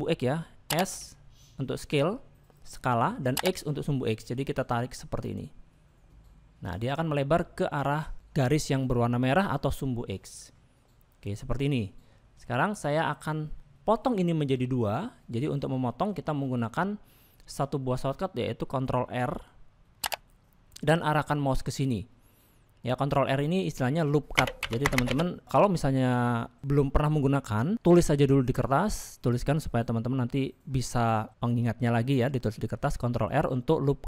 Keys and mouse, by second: 10.2-14.0 middle drag, 15.9 shift+middle click, 20.2 ctrl+r.